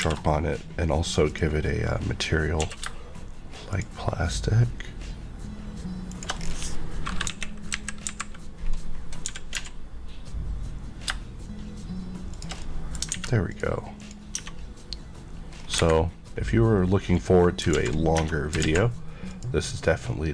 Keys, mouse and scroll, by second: 0.0 alt+m, 1.2 click, 1.9 middle click, 2.3 scroll up 1, 2.6 q, 3.7 shift+click, 6.4 scroll, 6.4 scroll down 1, 7.2 KP_1, 7.7 KP_3, 8.0 KP_Decimal, 8.7-9.2 scroll up 1, 9.2 g, 9.5 z, 12.3 click, 12.6 middle click, 13.1 alt+a, 13.5 click, 14.0 click, 14.3 Tab, 15.5 scroll up 1, 15.7 Escape, 16.2 scroll up 1, 17.1 click, 17.7 alt+z, 18.1 Tab, 18.6 alt+z, 19.3 click.